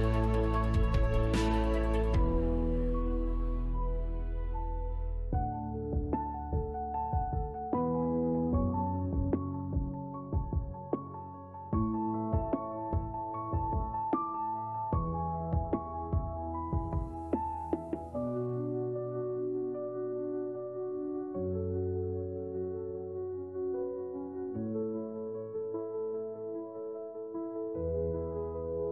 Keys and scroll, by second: 1.5 ctrl+z, 3.2 Delete, 11.0 shift+x, 15.1 x, 15.7 Tab, 17.5 j, 22.4 shift+w, 24.8 Escape, 25.7 shift+w.